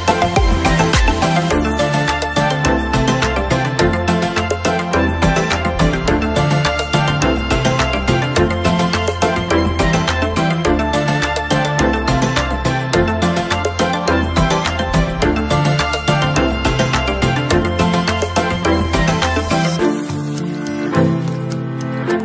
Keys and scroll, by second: 2.2 ctrl+c, 16.9 ctrl+-.